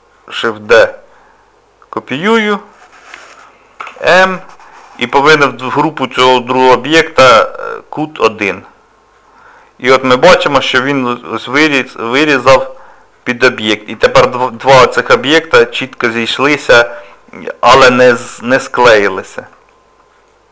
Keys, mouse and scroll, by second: 1.0 shift+d, 9.5 middle click, 10.2 scroll up 2, 10.7 middle click, 14.1 shift+middle click, 14.3 shift+middle click, 14.7 middle click, 16.8 middle click, 19.1 shift+middle click, 19.7 middle click.